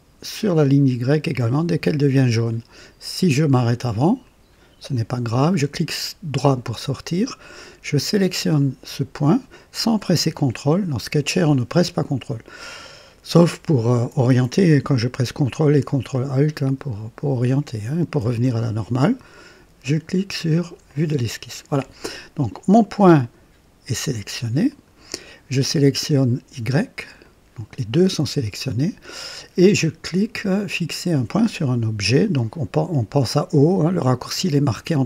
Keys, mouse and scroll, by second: 4.2 click, 4.9 right click, 8.3 click, 16.1-18.4 ctrl+alt+drag, 20.9 click, 23.2 click, 24.7 click, 27.2 click.